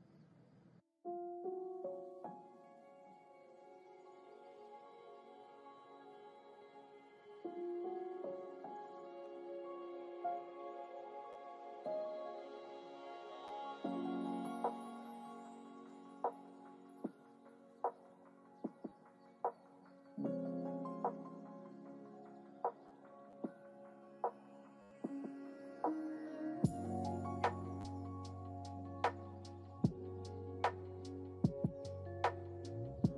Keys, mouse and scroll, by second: 1.8 click, 3.6 click, 4.3 click, 4.8 click, 11.6 click, 12.6-17.0 drag, 18.6 click, 20.6 click, 21.0 click, 22.1 click, 24.6 ctrl+z, 25.7 click, 27.8 space, 28.4 click, 29.3 click, 31.7 drag, 32.2 click.